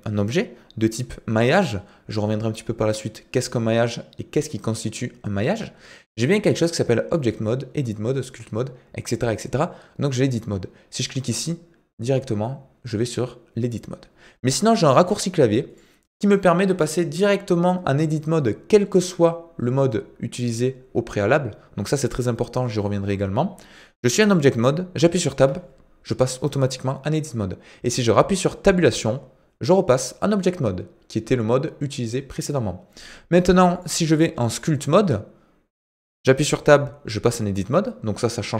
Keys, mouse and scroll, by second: 15.1 click, 33.8-34.7 drag.